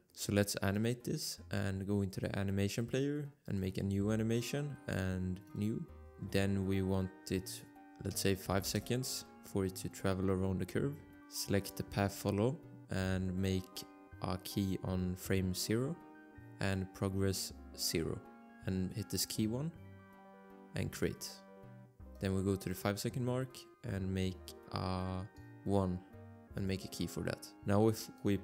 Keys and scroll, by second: 5.8 Return.